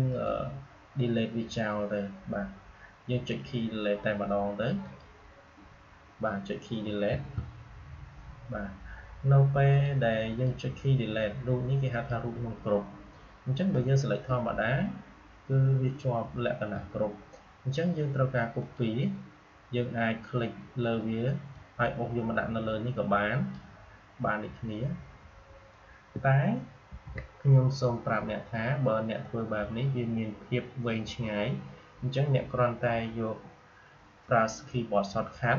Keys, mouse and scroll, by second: 0.0 right click, 4.7 click, 8.8 Delete, 9.6 click, 18.5 click, 21.4-25.9 drag, 26.1 click, 26.8 ctrl+z, 27.6 click.